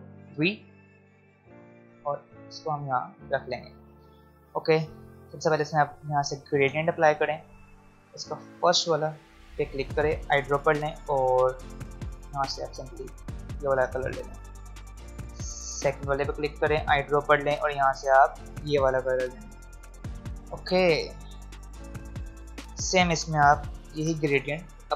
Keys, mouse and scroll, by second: 0.2 ctrl+v, 2.1-3.9 drag, 6.7 click, 13.1 click, 14.3 v, 15.8 click, 19.7 v, 20.5 click, 23.9 i, 24.7 click.